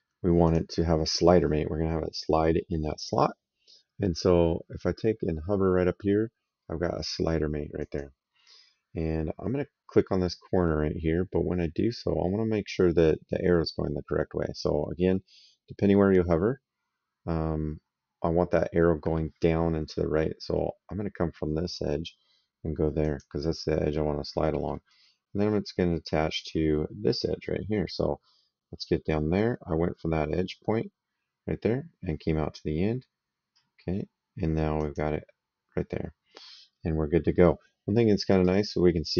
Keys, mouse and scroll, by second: 0.2 click, 7.6 click, 22.8 click, 24.1 middle click, 24.7 right click, 34.6 click, 38.2 right click.